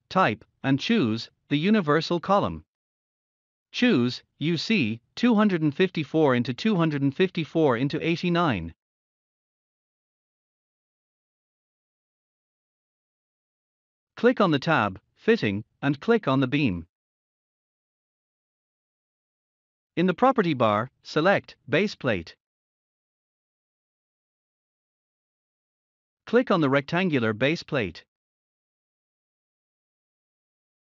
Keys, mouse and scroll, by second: 5.0 click, 6.6 click, 8.1 scroll up 1, 10.5-11.5 typing, 11.0 click, 12.7 middle click, 13.8-15.7 scroll up 1, 15.5-16.6 typing, 16.3 click, 18.4-19.1 typing.